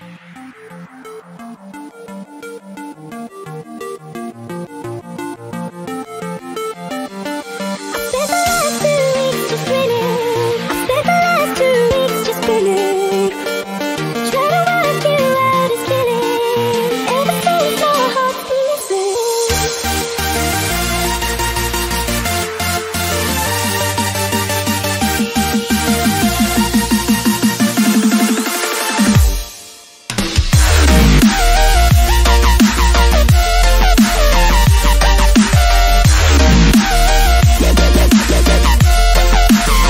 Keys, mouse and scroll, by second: 1.0-1.6 alt+scroll down 1, 2.3 alt+scroll down 1, 3.2 alt+scroll up 1, 5.3 click, 6.6 ctrl+j, 7.8 ctrl+click, 9.6 ctrl+e, 11.7-13.9 drag, 14.1-23.7 drag, 25.3-29.7 drag, 29.7-35.1 drag, 36.6 ctrl+0, 38.2-39.8 drag.